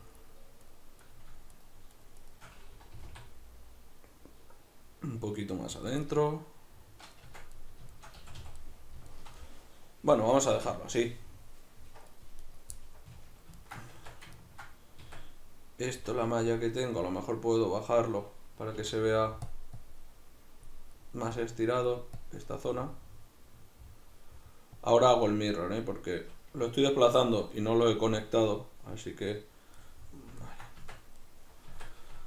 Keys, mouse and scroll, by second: 0.7 right click, 1.1 right click, 1.5 shift+right click, 2.9 g, 5.9 click, 6.1-12.4 middle drag, 7.2 Tab, 8.2 a, 12.4 right click, 12.8-19.5 middle drag, 14.0 Tab, 15.0 Tab, 18.8 f, 19.5 click, 20.9 middle click, 21.3-22.7 drag, 22.7-24.8 middle drag, 24.8 click, 25.3-32.2 middle drag, 30.8 Tab, 31.7 Tab.